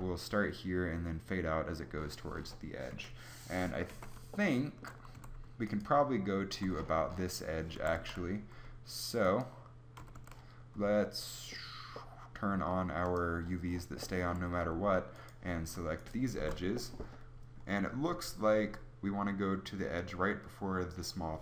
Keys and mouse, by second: 2.9 KP_3, 4.2 Tab, 5.1 a, 7.7 a, 7.9 a, 9.9 a, 10.1 a, 14.1 a, 14.3-15.9 drag.